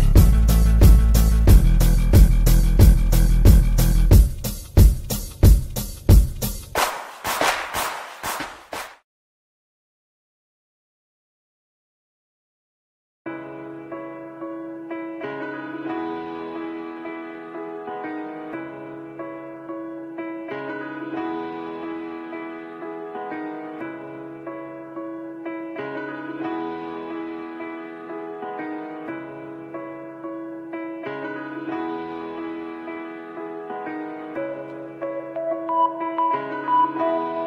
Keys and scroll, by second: 4.5 shift+Page_Up, 16.2 shift+Page_Up, 19.3 c, 28.9 l, 30.5 Delete.